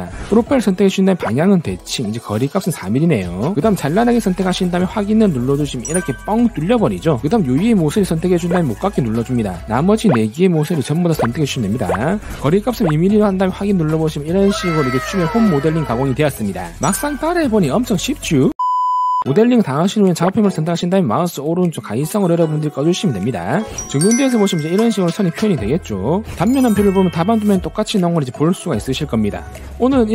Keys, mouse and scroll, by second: 1.0 click, 2.0 click, 2.8 click, 3.2 4, 4.8 click, 5.6 click, 8.1 middle click, 8.6 click, 9.5 click, 9.8 shift+middle click, 10.3 click, 10.5 shift+middle click, 10.7 middle click, 11.3 click, 11.4 shift+middle click, 11.9 click, 12.1 shift+middle click, 14.3 click, 17.1 scroll up 2, 23.2 click, 24.9 alt+w, 25.8 alt+q, 28.6 shift+middle click, 29.6 shift+middle click.